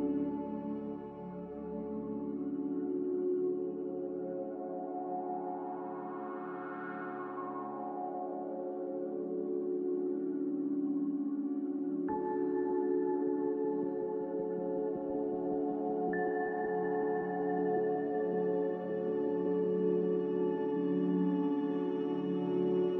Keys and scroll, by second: 3.3 Delete, 4.6 g, 10.4 a.